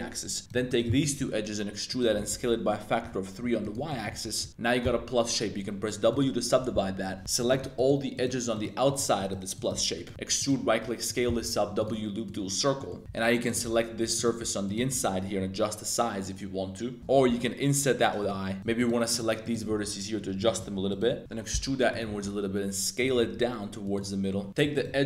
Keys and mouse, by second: 0.4 click, 0.6 shift+click, 0.8 middle click, 1.1-4.8 typing, 3.6 click, 3.8 middle click, 7.0 2, 7.3 alt+shift+click, 7.7 alt+shift+click, 8.1 alt+shift+click, 8.8 alt+shift+click, 9.1 alt+shift+click, 9.5 alt+shift+click, 9.9 click, 10.1 e, 11.1 click, 11.1 s, 11.2 w, 12.7 middle click, 13.0 shift+super+z, 14.1 shift+click, 14.6 shift+super+click, 14.9 s, 17.5 i, 18.2 click, 18.6 1, 18.7 shift+click, 19.1 shift+click, 19.4 shift+click, 19.6 s, 20.4 click, 20.5 3, 21.2 e, 21.9 click, 22.1 shift+s, 23.2 s, 23.8 click, 24.0 middle click, 24.5-25.0 typing, 24.7 alt+click.